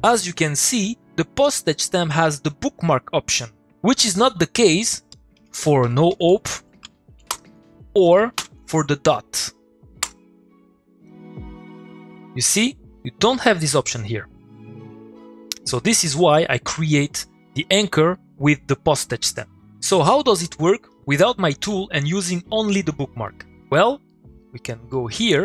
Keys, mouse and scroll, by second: 5.1 click, 5.4 Tab, 5.6-6.8 typing, 7.1 Down, 7.3 Return, 7.8-8.2 click, 10.0 Return, 15.2 click, 20.9 click, 23.4 middle click, 23.6 click, 23.7 middle click, 25.2 click.